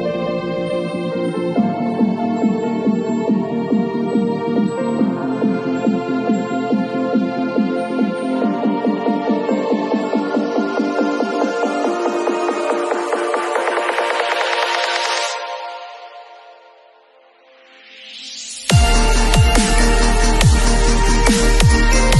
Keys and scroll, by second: 6.4 super+i, 7.9 b, 9.5 ], 16.6 [, 18.4 [, 21.6 ].